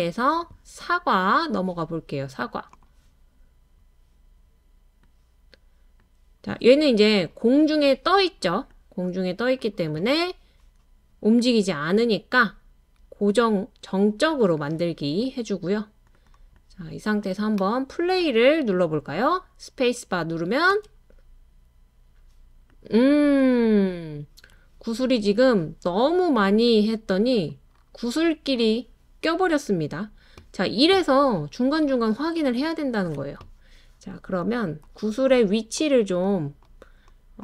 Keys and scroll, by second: 20.7 space.